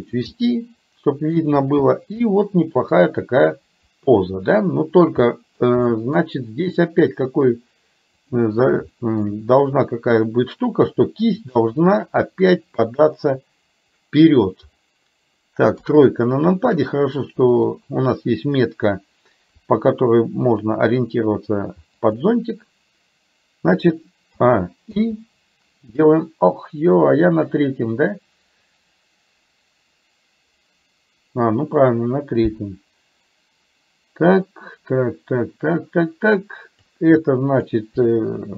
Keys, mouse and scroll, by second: 0.4-1.4 scroll up 1, 2.4-2.8 scroll up 1, 2.8 scroll down 1, 3.6-5.6 middle drag, 3.6-4.7 scroll up 1, 4.7-5.3 scroll down 1, 5.9 middle click, 8.9 shift+middle click, 13.1-14.6 drag, 15.8 KP_3, 17.7 click, 19.6 r, 24.4 a, 24.9 i, 27.6-36.9 drag, 37.4 click.